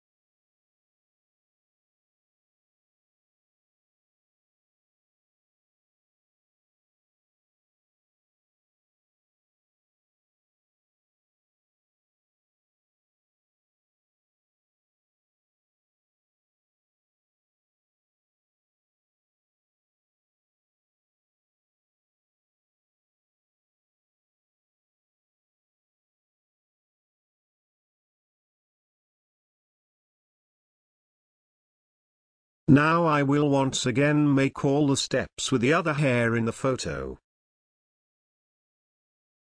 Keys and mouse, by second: 0.8 space, 1.6 alt+click, 4.2 space, 4.5 alt+click, 5.2 alt+click, 17.5 ctrl+space, 17.7 ctrl+click, 17.9 ctrl+click, 18.7 space, 28.1 space, 28.4 alt+click, 30.0 alt+click, 30.8 alt+click, 37.1 alt+F9, 38.5 space.